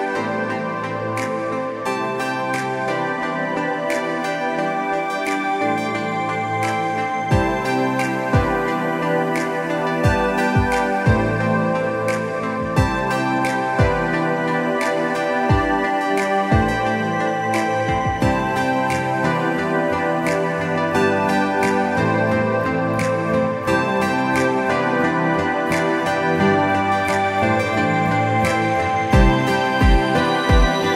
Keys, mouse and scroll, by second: 10.5 ctrl+shift+[, 11.9 click, 12.1 space, 13.4 click, 13.5 space, 17.2 click.